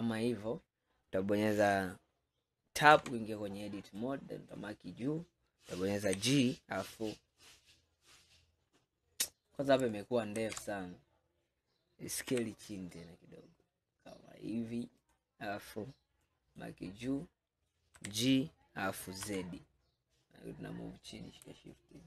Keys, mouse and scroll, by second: 3.0 Tab, 4.0 click, 6.1 g, 10.5 ctrl+z, 12.3 s, 16.3 click, 18.0 g.